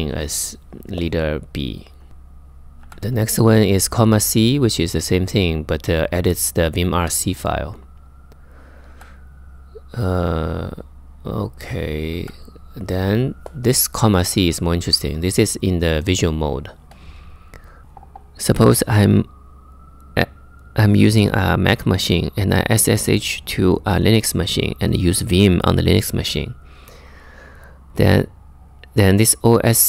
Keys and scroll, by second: 0.9 typing, 2.4 j, 8.5 j, 11.8 j.